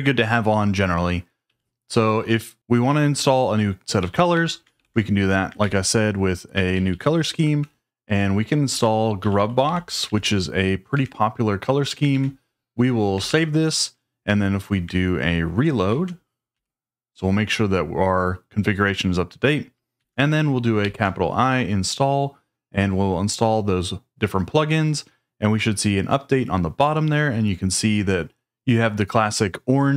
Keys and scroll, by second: 1.4 j, 3.7-5.2 typing, 5.6 shift+super+v, 6.3 typing, 6.7 Down, 6.9 Down, 7.6 Return, 8.0 Escape, 8.4-10.7 typing, 10.9 Escape, 12.1 shift+;, 13.1 typing, 15.8 ctrl+a, 16.5 r, 19.9 ctrl+a, 20.8 shift+i.